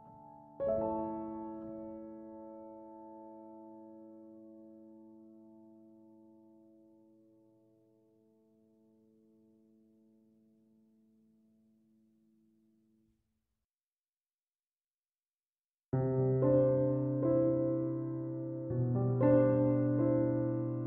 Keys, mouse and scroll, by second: 19.7 ctrl+7.